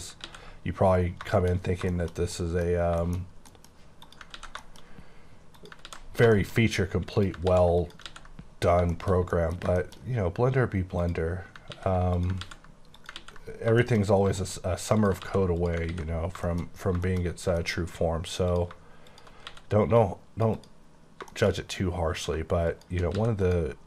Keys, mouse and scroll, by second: 0.3 ctrl+x, 0.7-1.3 scroll down 12, 1.4 shift+middle click, 1.6 scroll up 1, 1.9 middle click, 2.3 middle click, 2.7-3.4 scroll up 6, 3.0 shift+middle click, 3.5 middle click, 4.0 click, 4.3 ctrl+x, 4.6 shift+middle click, 4.8-5.5 shift+scroll up 4, 5.5 click, 5.8 ctrl+x, 6.0 ctrl+scroll down 3, 6.3-6.8 shift+scroll up 6, 6.4 shift+middle click, 7.2 click, 7.5 x, 7.8 click, 8.1 x, 8.3-8.8 scroll down 9, 8.9 shift+middle click, 10.0 scroll up 6, 11.0 click, 11.3 scroll up 6, 11.7 x, 12.2 click, 12.4 x, 12.9 click, 13.2 x, 13.4 scroll down 5, 13.8 shift+middle click, 14.1-14.7 scroll up 6, 14.3 middle click, 15.0 click, 15.2 x, 15.6 click, 15.9 x, 16.1 scroll down 8, 16.4 shift+middle click, 16.7-17.1 scroll down 3, 17.1 shift+middle click, 17.3-18.2 shift+scroll up 6, 17.6 middle click, 18.5 click, 19.1 shift+click, 19.5 x, 19.9 click, 20.5 double click, 20.8-21.2 scroll down 10, 21.3 shift+middle click, 21.5 shift+scroll up 4, 22.2 click, 22.3 shift+click, 23.1 click, 23.2 x, 23.4 click, 23.7 scroll down 7.